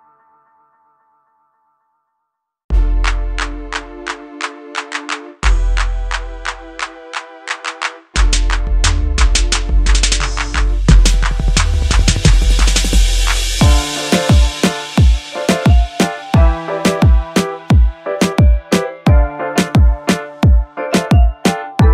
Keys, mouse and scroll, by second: 0.0-0.8 drag, 1.4 alt+scroll up 1, 3.6-4.5 alt+click, 4.6-5.2 alt+scroll up 1, 6.3 click, 9.9 click, 9.9 click, 12.9 click, 13.0 click, 18.5 scroll down 1, 19.1 scroll up 1, 20.3-21.9 drag.